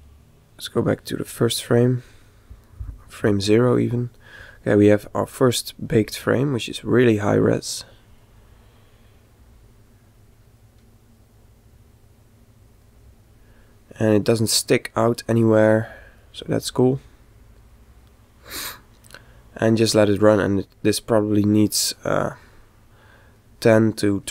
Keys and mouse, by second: 0.4 click, 3.0 Left, 8.1-10.3 middle drag, 10.9-17.3 middle drag, 18.0-19.9 middle drag.